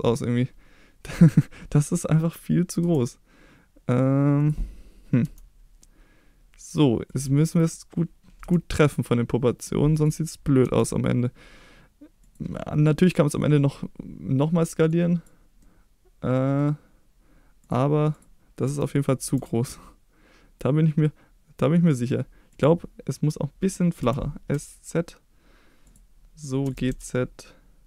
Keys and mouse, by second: 2.8 s, 4.4 click, 5.2 g, 7.0 click, 8.4 s, 9.9 click, 10.6 g, 12.2 click, 17.6 click, 18.1 click, 18.6 a, 19.2 s, 22.5 click, 24.0 s, 24.5 z, 25.8 click, 26.6 g, 26.9 z.